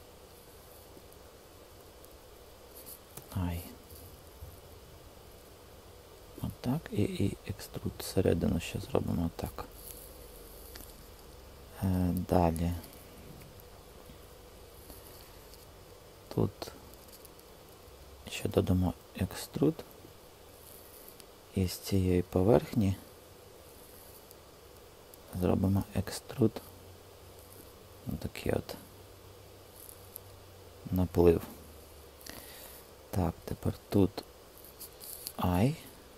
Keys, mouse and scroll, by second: 3.0 i, 6.8 e, 8.8-10.4 typing, 18.1 shift+click, 18.6 e, 25.5 e, 27.6 typing, 35.2 i.